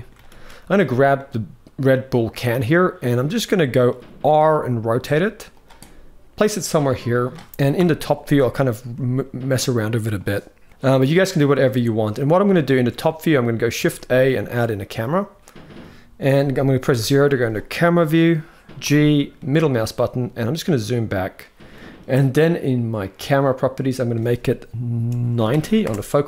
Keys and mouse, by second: 0.1 ctrl+s, 0.9-2.2 middle drag, 2.8 middle click, 4.0 r, 5.5-6.1 middle drag, 6.9 middle click, 7.5 KP_7, 8.5 r, 12.4 shift+middle click, 13.5 shift+a, 16.7 KP_0, 18.6 g, 22.8 click, 23.7-26.2 drag.